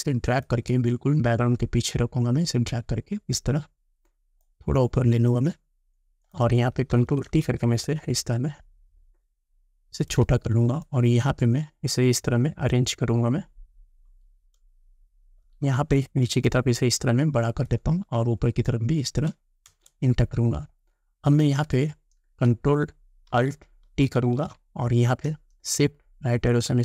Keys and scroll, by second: 7.0 ctrl+t, 19.7 Return, 26.5 shift+Right.